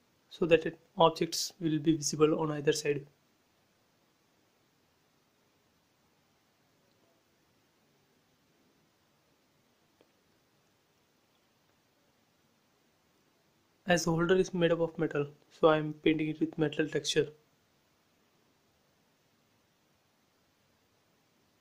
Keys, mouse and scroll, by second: 0.5 scroll down 1, 1.4 click, 1.9 scroll up 1, 2.9 shift+middle click, 3.6 scroll up 1, 4.7 click, 9.4 click, 11.5 scroll up 1, 14.1 click, 15.2 scroll up 1, 16.4 click, 17.0 space, 17.8 ctrl+z, 18.3 click, 19.6 b, 19.8 click.